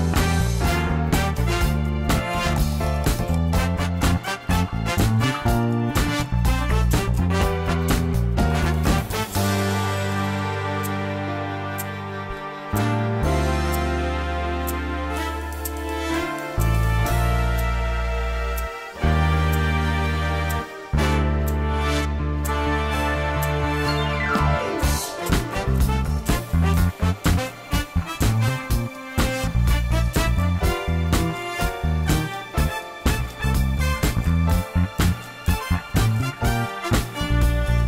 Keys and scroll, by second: 1.9 ctrl++, 8.4 Tab, 9.5 Tab, 11.5 2, 14.9 shift+z, 18.1 ctrl+b, 20.3 Tab, 26.6 Tab, 27.6 ctrl+r, 31.1 1, 32.1 shift+z.